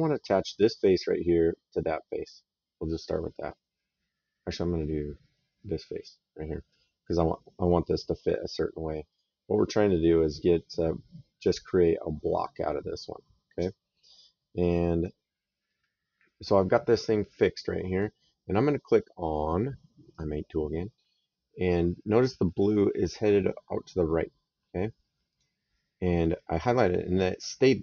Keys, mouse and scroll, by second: 8.9 click, 14.5 click, 19.9 click, 22.3 middle click, 25.1 click.